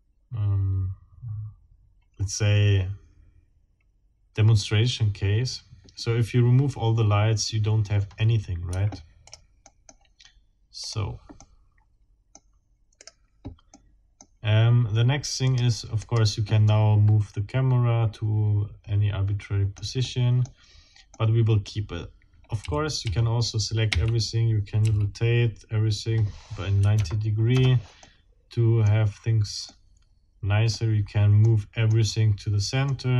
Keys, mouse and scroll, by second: 8.7 Escape, 9.2 scroll up 1, 9.7 click, 10.8 scroll up 1, 11.4-12.5 drag, 13.0 right click, 13.7 middle click, 14.6 scroll down 1, 15.5 click, 16.0 right click, 16.7-20.0 middle drag, 20.2 middle click, 20.5-21.0 scroll up 1, 21.1 middle click, 22.3 scroll down 1, 22.6 a, 23.9 r, 24.8 x, 26.8 KP_9, 26.9 KP_0, 27.5 KP_Enter, 28.0 middle click, 28.8-29.3 scroll up 1, 29.4 scroll up 1, 29.7-30.9 middle drag, 31.4 middle click, 32.9 middle click.